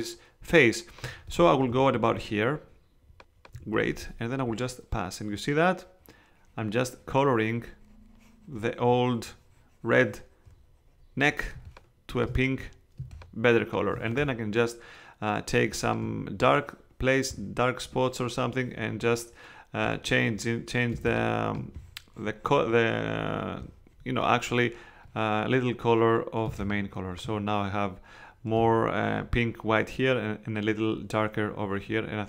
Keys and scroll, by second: 11.5 space, 13.0 space, 20.9 space, 26.4 space.